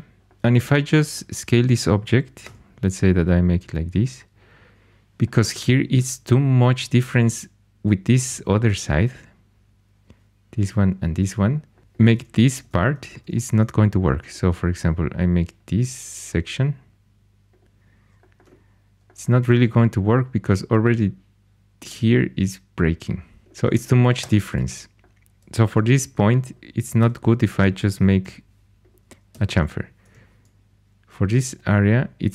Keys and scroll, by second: 2.4 3, 11.8 3, 12.5 ctrl+2, 24.1 Escape, 25.6 3, 26.9 x, 27.8 Escape, 28.2 4, 29.2 x, 30.0 2.